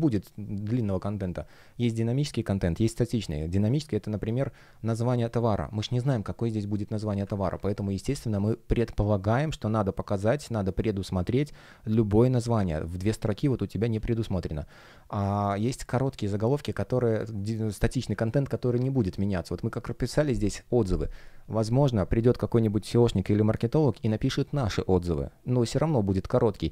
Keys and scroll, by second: 0.6 space, 4.5 space, 16.2 space, 17.3 super+space.